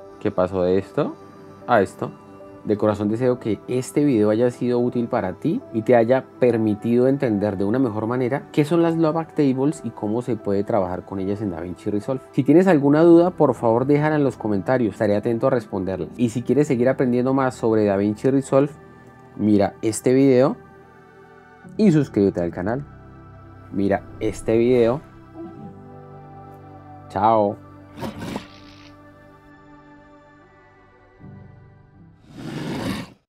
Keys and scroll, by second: 1.5 shift+d.